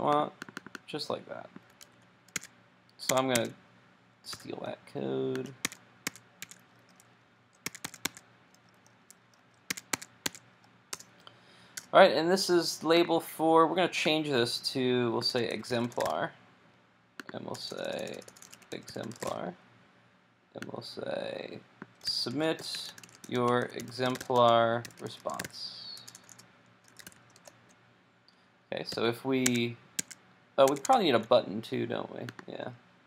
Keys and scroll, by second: 1.8 super+c, 2.5 super+Tab, 3.2 super+Tab, 4.4 super+v, 28.9 super+s, 29.6 super+Tab.